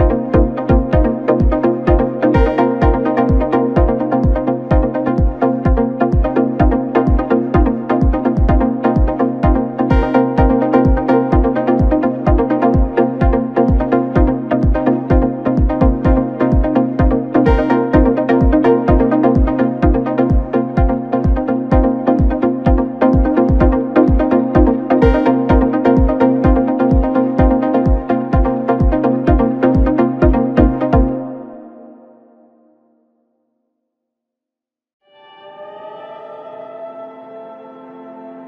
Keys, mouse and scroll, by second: 3.2 g, 5.5 s, 8.1 Tab, 8.3-8.6 scroll down 3, 8.6-9.4 middle drag, 9.4-9.9 scroll up 2, 9.9 KP_7, 11.0 right drag, 11.2-13.2 middle drag, 13.2-13.5 drag, 13.5 scroll up 2, 13.7 scroll down 2, 13.8-14.2 scroll up 1, 14.2 KP_Divide, 14.8 Tab, 15.0-16.7 scroll down 4, 16.8 3, 18.0 KP_1, 18.5-19.8 scroll up 2, 19.8 s, 21.0 g, 23.6 u, 25.2 a, 26.4 Tab, 27.6 click, 28.0-28.6 scroll up 1, 28.6 KP_Divide, 29.3 KP_1, 29.9 Tab, 30.4 Tab, 30.8-31.6 scroll down 4, 31.6-32.9 middle drag, 32.9 Tab, 33.5 Tab, 36.5-38.4 drag.